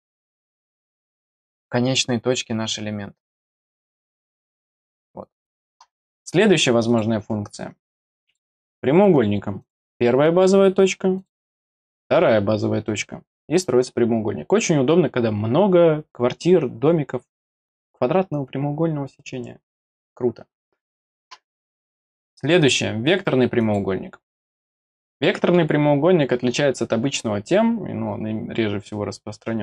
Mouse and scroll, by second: 1.0 click, 2.6 click, 6.8 click, 8.2 click, 9.6 click, 11.1 click, 11.7 middle click, 22.0 click, 22.6 click, 23.6 click, 24.4 click, 25.2 middle click.